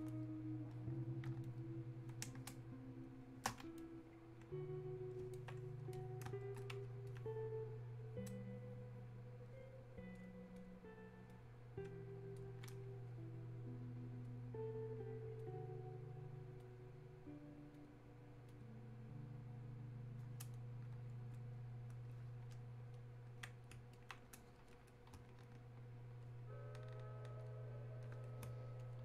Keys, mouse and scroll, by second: 1.5 ctrl+click, 2.5 space, 3.1 click, 3.2 space, 3.8-24.0 drag, 24.0-26.7 alt+drag.